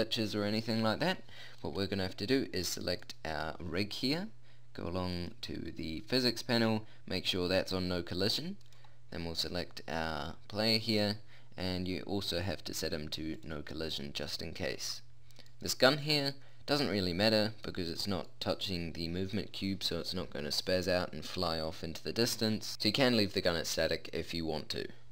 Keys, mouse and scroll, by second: 2.5-4.7 right drag, 4.7 middle click, 5.1-6.7 drag, 7.3-8.6 middle drag, 8.6-10.1 right drag, 10.1 click, 10.3 middle click, 12.4-14.1 middle drag, 15.5-16.9 middle drag, 22.3-25.1 middle drag.